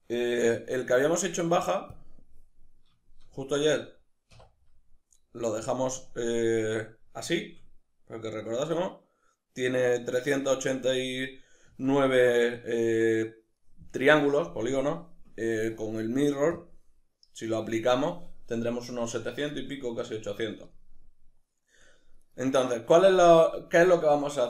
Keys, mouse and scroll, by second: 0.4 \, 1.0 Tab, 2.4 middle click, 4.4 1, 4.6 middle click, 11.6-16.5 middle drag, 16.5 drag, 21.2-22.2 middle drag, 22.2 right click, 22.6-24.4 middle drag.